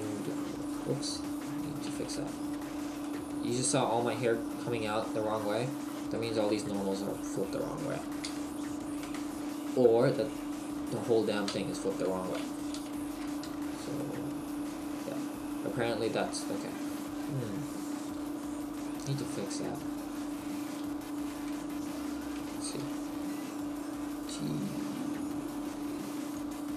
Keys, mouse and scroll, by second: 0.6 right click, 1.1 Tab, 2.0 a, 2.6 Tab, 3.0 middle click, 5.6 middle click, 6.1 right click, 6.4 Tab, 9.2 Tab, 11.5 Tab, 12.8 ctrl+shift+n, 13.5 Tab, 14.0 middle click, 23.9-24.4 scroll down 1, 23.9 t, 26.4 click.